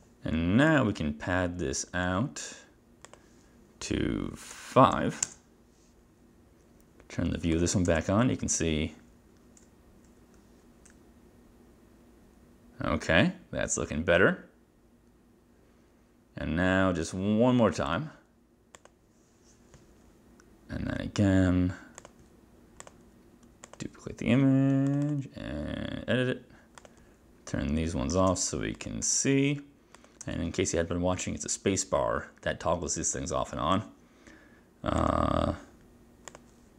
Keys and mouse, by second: 0.8 click, 3.2 click, 4.6 5, 5.3 Return, 7.6 click, 7.9 click, 8.0 space, 18.0 click, 22.1 click, 22.9 click, 25.0 click, 25.1 click, 26.9 click, 28.2 click, 28.3 space, 28.8 click, 29.1 space, 30.0 click, 30.3 space, 35.0 click, 36.3 click.